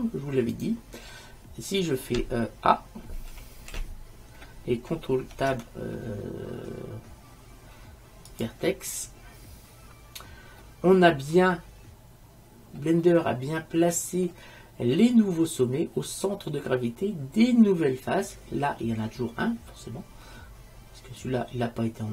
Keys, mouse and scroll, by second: 0.1 click, 3.4 a, 3.8 a, 5.5 ctrl+Tab, 10.7 middle click, 11.6 middle click, 13.1-14.8 middle drag, 20.5-22.1 middle drag.